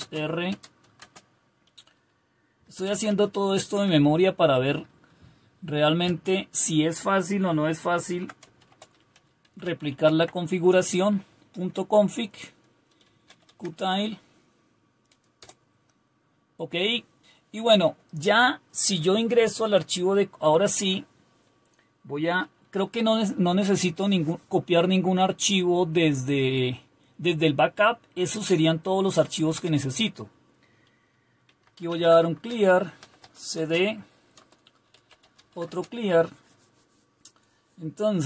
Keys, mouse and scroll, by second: 0.0-1.0 typing, 2.4-3.6 typing, 3.6 Tab, 6.1 typing, 8.1-10.4 typing, 15.2-15.9 typing, 32.1-36.0 typing, 33.6 Return.